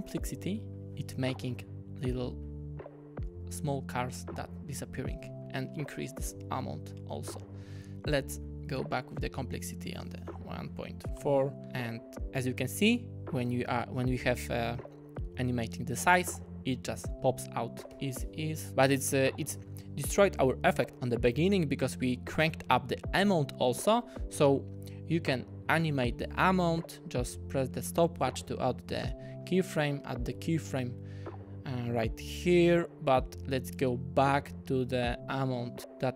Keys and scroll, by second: 10.0-10.9 typing, 11.2 Return, 17.9 F9, 18.6 space, 26.1 u.